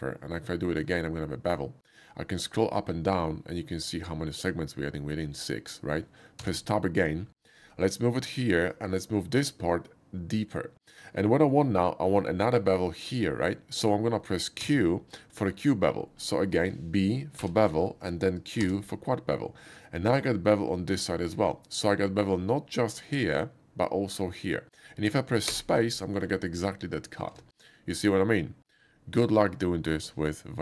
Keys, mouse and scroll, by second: 3.1 middle click, 6.4 Tab, 7.7 middle click, 9.5-10.9 drag, 11.5 middle click, 14.8 q, 15.5 middle click, 18.6 q, 21.3 click, 21.9 middle click, 25.5 space, 26.0 middle click, 27.3 Tab, 28.0 middle click.